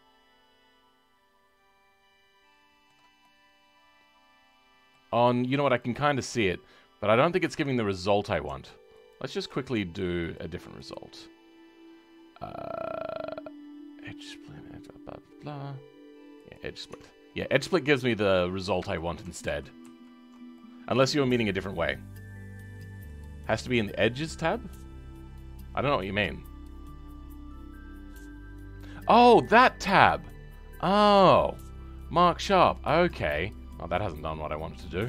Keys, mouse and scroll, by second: 7.5 Tab, 7.9-9.0 middle drag, 9.0 alt+click, 17.2-17.5 scroll down 2, 17.5-19.4 middle drag, 19.4 ctrl+z, 19.8 ctrl+z, 20.5-25.6 middle drag, 25.6-32.1 scroll up 2, 32.7 middle click, 33.6-34.5 scroll up 2, 34.5-35.0 middle drag.